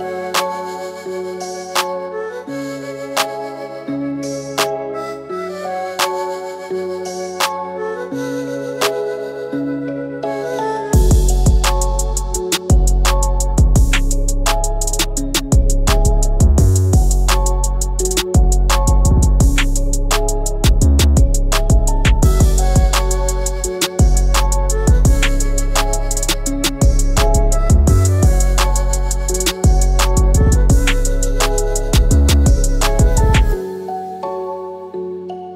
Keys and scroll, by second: 0.7 |, 5.1 ctrl+g, 7.3 Up, 8.7 Up.